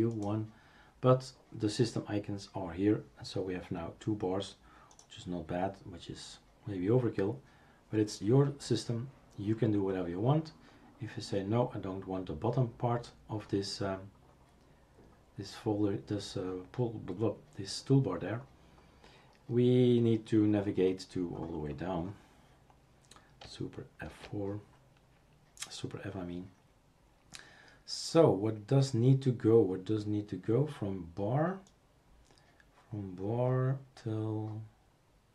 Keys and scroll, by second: 24.1 super+f.